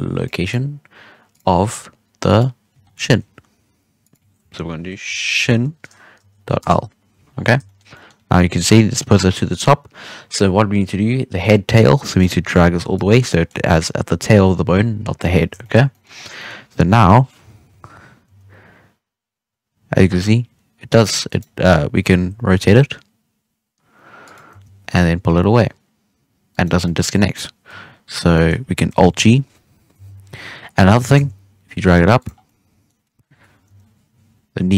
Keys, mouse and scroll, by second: 1.2-2.7 drag, 2.7-3.1 scroll down 1, 3.1-4.0 scroll up 2, 4.0-7.2 drag, 7.2-7.6 scroll down 1, 7.6-8.2 shift+middle drag, 8.2-11.3 scroll up 3, 12.1 click, 13.1 scroll down 2, 13.2-15.7 middle drag, 15.7 scroll down 2, 15.8 middle drag, 16.0 scroll up 2, 16.3-16.9 middle drag, 16.9 right click, 17.6 KP_3, 18.2 g, 21.4-22.1 scroll down 1, 22.1 r, 24.4 g, 26.8-28.8 middle drag, 28.8 alt+g, 29.3-29.9 scroll up 1, 29.9 KP_3, 30.6 scroll up 3, 30.8 g, 32.3 scroll down 3, 32.4-33.6 middle drag, 33.6 KP_1.